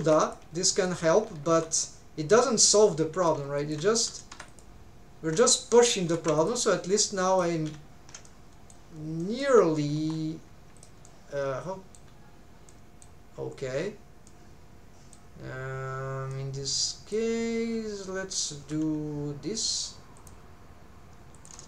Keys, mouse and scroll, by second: 0.2 right click, 0.2 click, 0.8 shift+right click, 0.8 shift+click, 1.5 m, 3.1 click, 3.6 shift+click, 4.3 m, 5.1 scroll down 2, 6.1 3, 6.4 alt+shift+click, 7.0 middle click, 7.5 alt+a, 8.2 middle click, 8.9 scroll up 1, 9.2 middle click, 10.0 1, 10.8 click, 11.1 middle click, 12.7 middle click, 14.3 middle click, 16.3 middle click, 18.6 k.